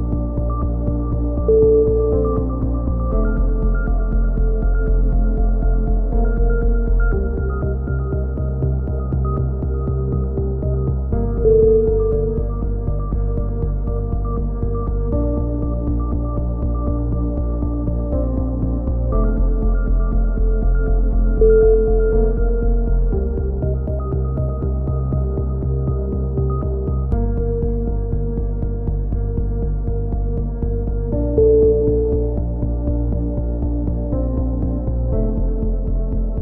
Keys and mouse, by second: 0.8 k, 1.2 click, 2.3 click, 2.4 a, 2.8 k, 4.9 click, 5.8 middle click, 5.9 click, 6.4 right click, 6.6 f, 7.8-9.1 right drag, 8.7-10.5 drag, 10.9 f, 11.3 a, 11.7 click, 12.7 click, 12.8 middle click, 13.7 right click, 14.2 click, 15.6-16.6 drag, 16.3 right click, 16.7 click, 19.3 a, 19.5 middle click, 19.7 z, 22.6 middle click, 23.2 click, 24.0-25.8 middle drag, 24.3 z, 29.2 z, 30.8 middle click, 31.6 click, 31.8 z, 32.0 middle click, 32.4 click, 32.9 a, 33.0 z, 33.4 Tab, 34.6 z, 35.8 click, 36.1 click.